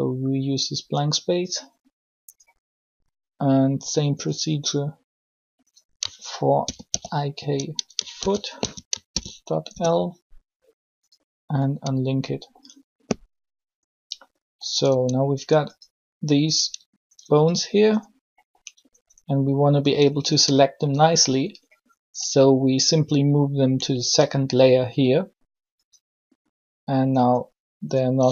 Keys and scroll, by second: 6.4 shift+i, 6.6 shift+k, 8.1 shift+f, 9.1 shift+l, 9.4 Return, 14.8 Tab.